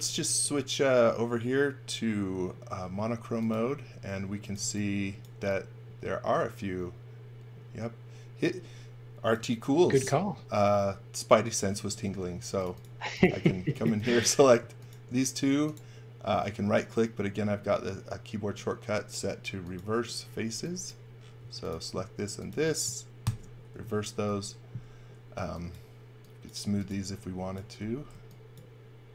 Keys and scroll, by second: 0.2 space, 4.2 x, 4.6 v, 12.3 space, 13.4-14.3 typing, 20.5 x, 21.4 space, 23.2 shift+r, 24.2 e, 26.4-27.8 typing.